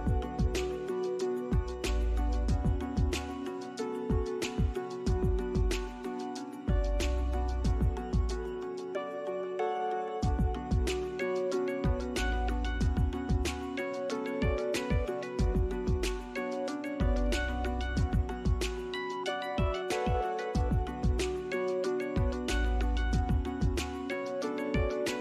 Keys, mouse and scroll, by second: 4.3 scroll down 1, 4.5 alt+middle click, 4.9 alt+scroll up 1, 5.1 alt+middle click, 5.4 alt+right click, 8.6 Escape, 8.8 scroll down 1, 10.0 alt+middle click, 12.5 Escape, 14.8 Escape, 15.3 alt+middle click, 17.5 Escape, 17.8 scroll down 1, 18.4 scroll up 1, 21.1 BackSpace, 23.4 scroll down 1, 23.7 middle click, 24.3 alt+click, 25.0 alt+middle click.